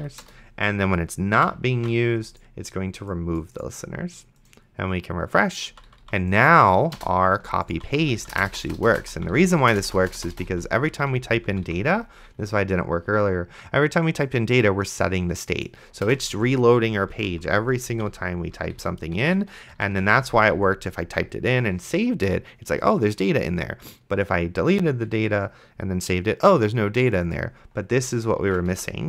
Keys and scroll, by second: 0.0 Down, 0.2 Return, 1.4 ;, 2.0 ctrl+s, 5.7 d, 7.0-10.5 typing, 16.2 d, 19.4 BackSpace, 19.8 d, 28.7 ctrl+a, 28.7 BackSpace.